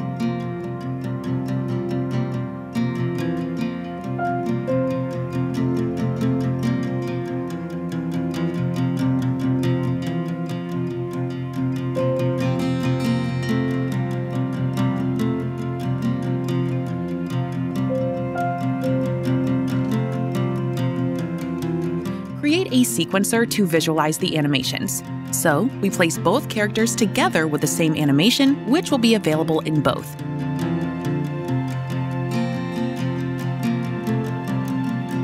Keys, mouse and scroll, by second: 2.2 click, 4.0 right click, 4.9 click, 5.5-9.7 typing, 10.5 Return, 12.6 click, 14.9 click, 18.8-19.3 scroll, 21.7 click, 22.7 click, 24.2 click, 25.7 click, 26.3-28.1 typing, 27.7 Return, 29.5-30.3 typing, 29.8-35.2 drag, 32.2-33.4 typing.